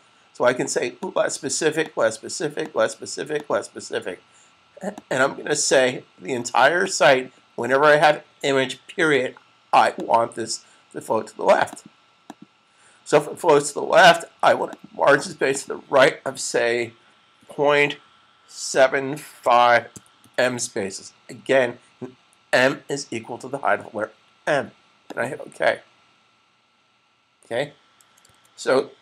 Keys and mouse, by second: 1.1 click, 9.8 click, 17.3 ., 18.7-22.8 typing, 24.9 click, 28.1 super+s.